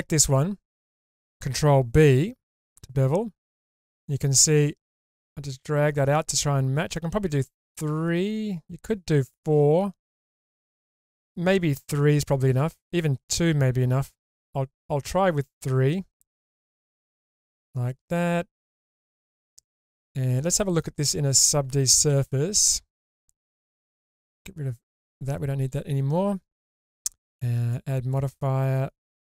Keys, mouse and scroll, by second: 0.9 shift+middle click, 2.6 ctrl+b, 6.6-7.1 scroll up 1, 8.4-8.8 scroll up 1, 11.2 scroll down 1, 11.8-12.6 scroll down 1, 14.6-15.2 scroll down 1, 15.2-16.3 scroll up 2, 18.6 click, 19.3-20.8 middle drag, 22.1 alt+z, 25.0 click.